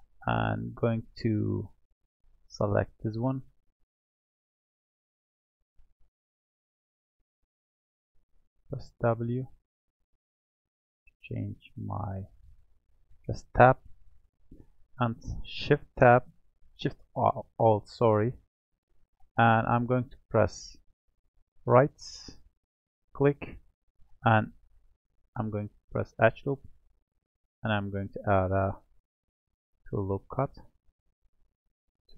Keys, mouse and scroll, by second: 0.9 click, 2.4-3.5 drag, 3.5-6.4 scroll up 1, 6.4 scroll up 1, 7.0 q, 8.8 w, 9.4 w, 9.9 w, 10.5 w, 11.9 click, 13.4 alt+click, 18.0 alt+shift+click, 19.3-20.1 scroll down 4, 20.1-21.1 scroll up 1, 21.1-24.2 right drag, 25.1-27.5 middle drag, 27.5-31.4 drag, 31.5-32.1 drag.